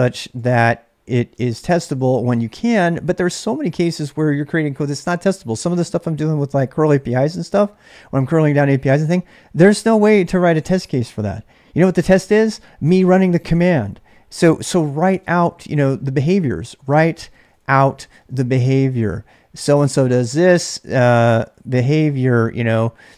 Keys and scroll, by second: 0.0-4.8 typing, 14.3-23.0 typing.